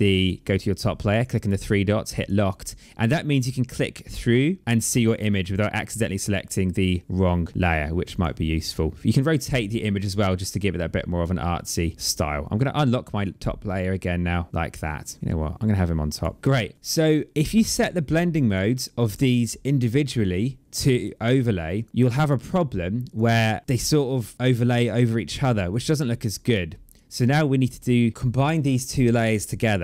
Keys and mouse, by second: 0.1 click, 2.1 click, 4.6 click, 7.0 click, 9.5 click, 11.4 click, 13.0 click, 14.4 click, 15.5 click, 16.7 click, 18.3 click, 20.8 click, 22.3 click, 25.6 click.